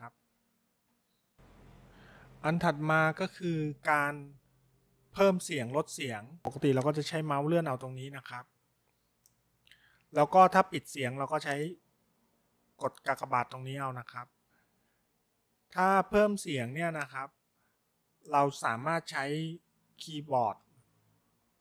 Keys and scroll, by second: 1.3 0.